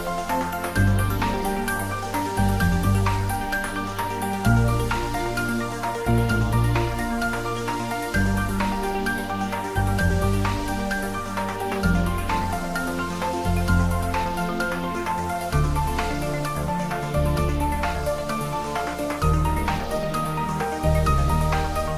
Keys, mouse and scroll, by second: 0.0 typing, 1.6-7.5 typing, 9.2 Return, 11.9 Return, 17.3 click.